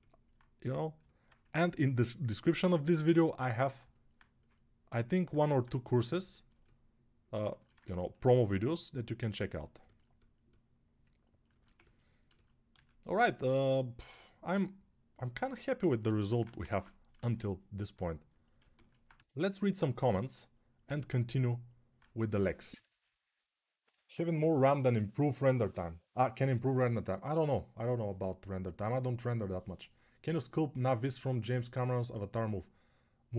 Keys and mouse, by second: 2.1 ctrl+z, 5.2-11.3 alt+drag, 11.3-15.5 ctrl+alt+shift+right drag, 12.5 alt+q, 15.5-33.3 alt+drag, 16.5 ctrl+Tab, 18.9 Tab.